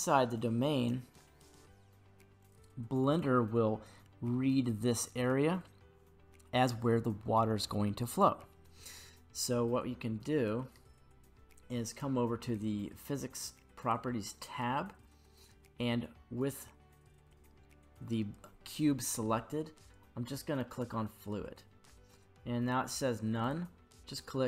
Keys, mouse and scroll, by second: 9.6-12.6 middle drag, 13.8 click, 18.3-20.7 right drag, 18.3 g, 20.7 click, 23.4-24.4 drag.